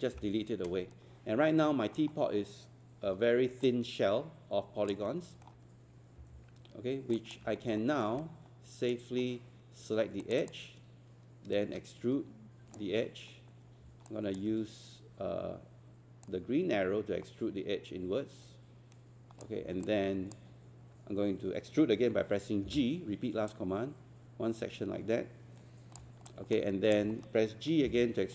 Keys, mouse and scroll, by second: 0.1 Delete, 1.4 scroll up 1, 3.5 alt+scroll up 1, 3.7 alt+click, 5.1 alt+middle click, 6.2 alt+6, 7.2 alt+click, 7.6 scroll up 1, 7.8 alt+middle click, 8.2 right click, 9.2 scroll up 1, 10.2 click, 12.0-13.0 shift+right drag, 14.1 alt+click, 16.3-19.6 drag, 19.9 alt+click, 22.7 g, 23.5-26.0 drag, 26.3 alt+click, 27.9 alt+g.